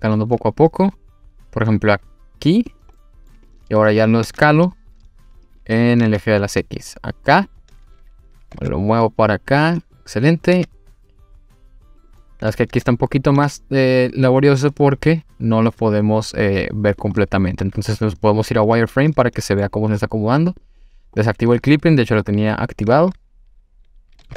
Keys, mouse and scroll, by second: 2.7 click, 3.0 middle click, 3.5 click, 3.9 s, 5.5 click, 6.0 s, 6.1 x, 7.3 click, 8.3 g, 8.5 x, 9.8 click, 10.6 g, 12.0 click, 12.2-12.8 middle drag, 13.3 g, 13.4 z, 16.9 click, 17.2 middle drag, 18.1 click, 19.1 middle click, 20.5 click, 21.2-22.2 scroll up 2, 24.2 g.